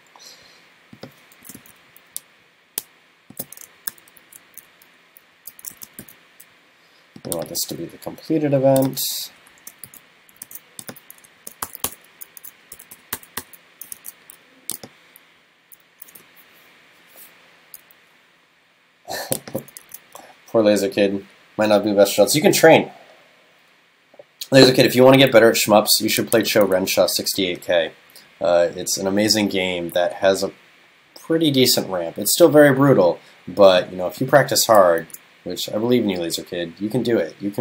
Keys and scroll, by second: 1.6 super+v, 3.8 shift+super+Left, 4.2 super+x, 5.4 super+Right, 7.6 super+c, 9.3 alt+shift+Left, 10.5 super+s, 11.4 shift+super+Left, 14.0 super+s, 19.9 super+s, 26.8 super+s, 35.1 super+s.